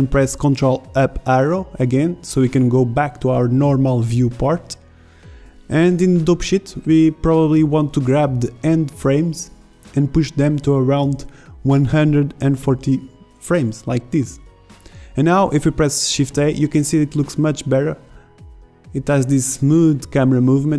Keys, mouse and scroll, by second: 2.8 ctrl+Up, 5.7 a, 6.2 b, 10.3 KP_0, 10.8 alt+a, 11.0 b, 11.3 g, 15.1 shift+Left, 15.5 alt+a.